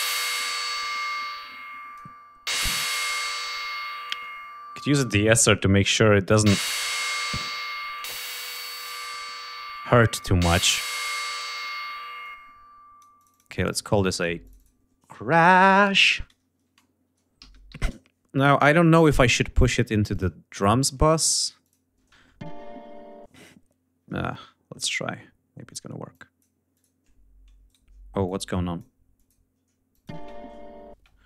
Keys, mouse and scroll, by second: 0.0 click, 1.0 click, 2.6 right click, 4.6 click, 7.1-7.9 drag, 8.3-8.9 drag, 9.4 click, 11.1 click, 11.9-13.3 drag, 13.8 click, 14.8-17.9 typing, 19.8 click, 21.3 click, 21.7 space, 23.0 space, 23.6-24.3 ctrl+scroll up 5, 24.5 d, 25.8 click, 26.4 click, 27.4 shift+right click, 28.0 shift+click, 28.9 click, 29.6 click, 29.9 space, 30.3 ctrl+scroll up 2, 30.7 ctrl+space.